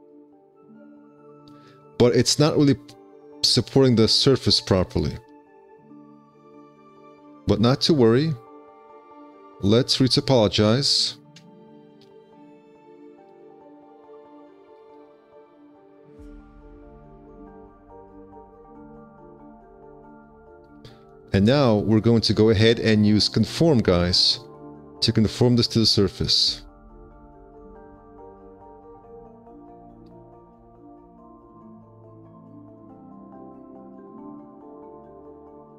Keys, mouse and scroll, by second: 0.8 q, 4.7 5, 5.4 d, 6.8 5, 13.1 ctrl+z, 14.7 5, 21.2 alt+q, 21.3 `, 21.8 1.